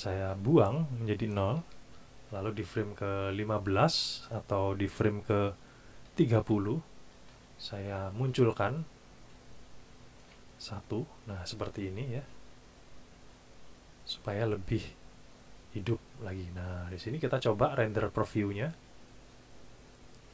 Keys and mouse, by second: 0.1 click, 1.4 KP_0, 1.6 KP_Enter, 3.2 click, 6.1 KP_3, 6.4 KP_0, 7.3 KP_Enter, 8.9 click, 10.2 KP_1, 10.7 KP_Enter, 14.7 click, 18.2 click.